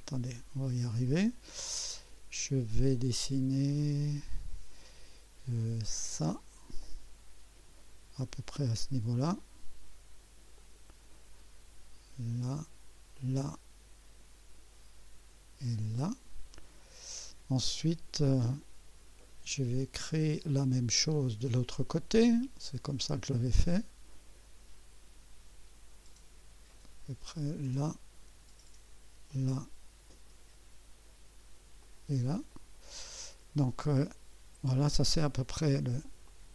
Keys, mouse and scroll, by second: 6.0 click, 10.5 click, 13.1 click, 15.6 click, 17.9 right click, 27.6 click, 29.3 click, 31.8 click, 32.5 right click, 33.6 right click, 36.2-36.5 drag.